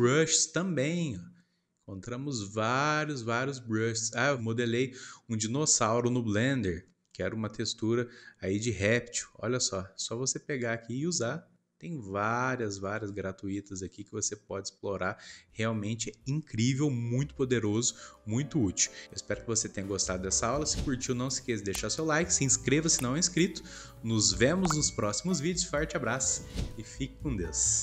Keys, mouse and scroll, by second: 17.7-18.9 scroll down 1, 18.9-20.1 scroll down 1, 20.1-23.1 scroll down 1.